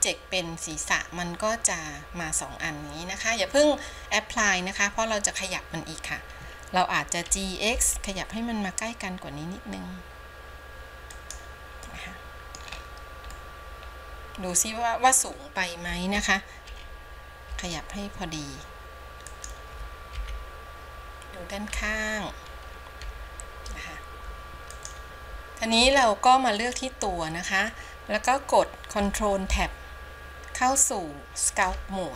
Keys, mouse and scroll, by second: 12.0 middle click, 12.8-13.2 scroll up 2, 13.5-16.8 middle drag, 16.8 g, 20.3 KP_1, 24.8-29.1 drag, 29.6 ctrl+Tab.